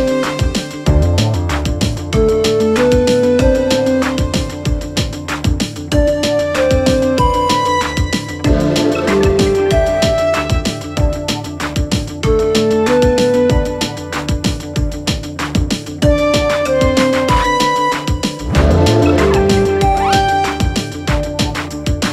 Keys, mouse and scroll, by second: 2.5 click, 5.1 ctrl+t, 6.9-14.3 alt+drag, 14.3 Return, 17.8-19.5 alt+drag, 19.5 alt+shift+right click, 21.8 click.